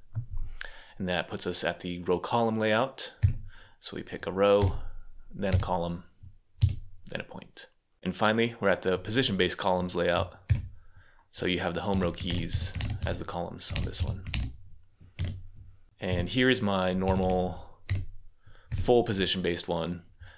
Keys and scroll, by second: 2.8-5.4 typing, 6.4 c, 10.3 super+k, 11.8-15.0 typing, 16.7-17.7 typing.